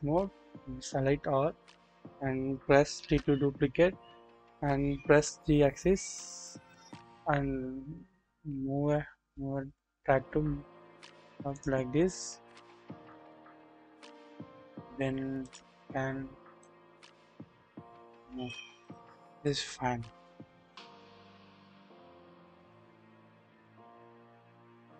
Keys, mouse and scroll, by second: 3.0 shift+d, 5.5 typing, 12.7 double click, 14.1 click, 16.2-16.6 scroll up 1, 16.6-18.5 drag, 19.5-21.3 drag, 21.5 scroll down 1, 22.8-23.6 scroll up 1, 23.6-24.9 drag.